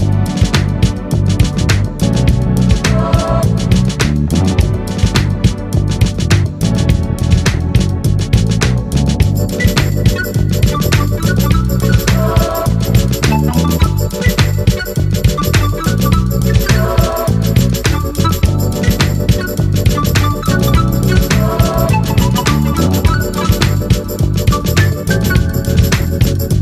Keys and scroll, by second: 1.5 ctrl+a.